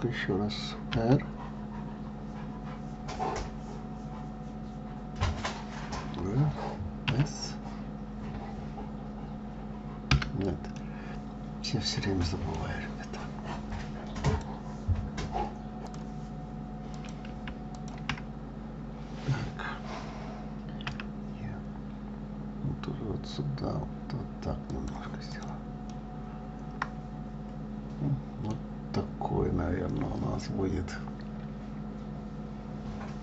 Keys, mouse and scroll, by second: 11.1-14.2 middle drag, 16.5 middle click, 17.6 click, 18.4 shift+click, 25.9 click, 26.5-29.6 middle drag, 32.9-33.2 scroll down 3.